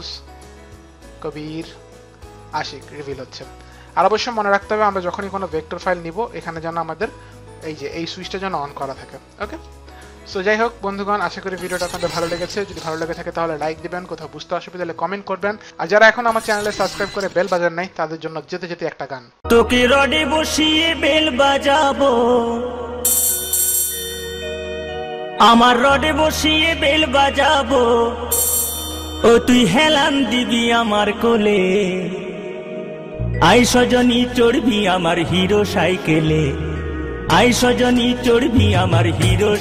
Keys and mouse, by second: 0.0 click, 1.6 click, 3.7 click, 6.5 click, 10.6 click.